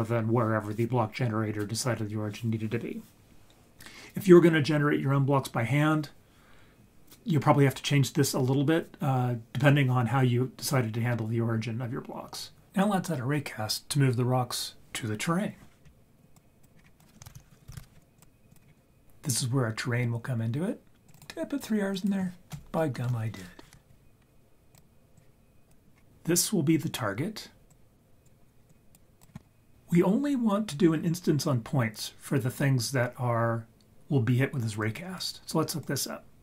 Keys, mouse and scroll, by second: 15.8-16.3 scroll down 1, 16.3 click, 16.3 scroll down 2, 16.7 scroll up 4, 17.0 click, 17.4 shift+a, 18.6-19.0 scroll down 3, 21.0-23.7 drag, 23.0 Left, 24.7 click, 25.9 scroll up 2, 27.7-28.2 drag, 28.7 click, 34.8 click, 35.8-36.4 drag.